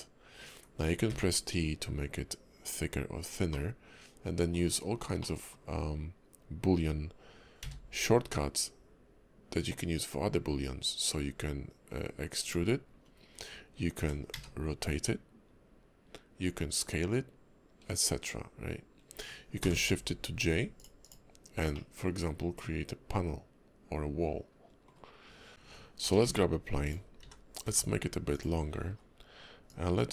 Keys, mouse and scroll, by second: 3.5 middle click, 4.7-5.1 scroll down 5, 5.2 middle click, 12.9-15.7 scroll up 1, 15.7 scroll up 1, 21.7 middle click, 25.2 scroll down 2, 26.0 g, 27.2 s, 28.9 scroll up 1, 29.7 click.